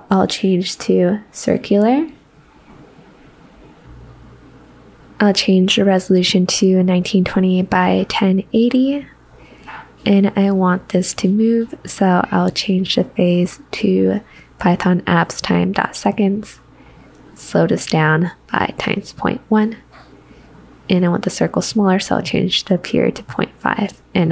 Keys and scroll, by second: 15.3-16.7 typing, 18.8-19.6 typing.